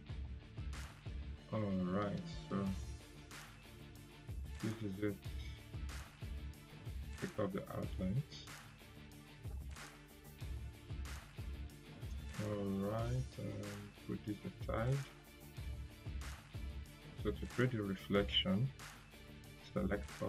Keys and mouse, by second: 1.0 click, 2.8 Delete, 4.4-5.6 drag, 6.8 right click, 9.2 click, 9.5 right click, 10.6-11.8 drag, 12.8 ctrl+g, 13.3-15.2 drag.